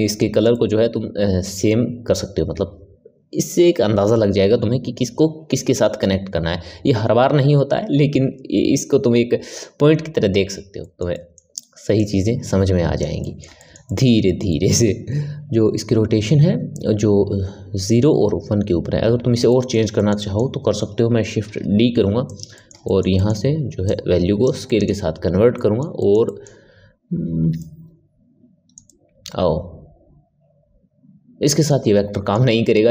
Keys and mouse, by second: 0.0-1.4 ctrl+middle drag, 1.4-1.9 drag, 10.7-11.9 ctrl+middle drag, 11.9 click, 13.1-17.6 middle drag, 19.4-21.4 middle drag, 21.4 shift+d, 22.5-23.8 ctrl+middle drag, 23.8-24.6 drag, 24.6-31.8 middle drag, 32.0-32.9 middle drag.